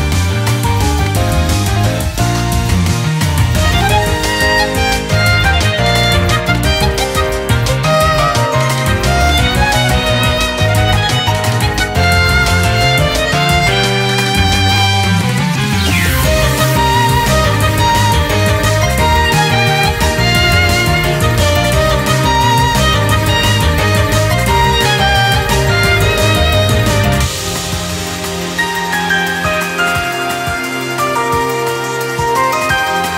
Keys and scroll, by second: 0.8 ctrl+-, 2.1 ctrl+-, 3.1 typing, 4.1 ctrl++, 4.6 ctrl+-, 7.9-8.9 typing, 8.0 ctrl+-, 8.1 ctrl++, 10.3 ctrl+u, 10.6 ctrl+-, 11.4-12.2 typing, 11.8 ctrl+-, 13.0 ctrl+u, 13.3 typing, 24.0 typing, 24.4 ctrl+-, 25.1 ctrl+-, 25.4 ctrl++, 26.0 ctrl++, 27.7 typing, 30.8 ctrl+-, 30.9 ctrl++, 32.1-32.7 typing, 32.9 ctrl+-, 33.1 ctrl+-.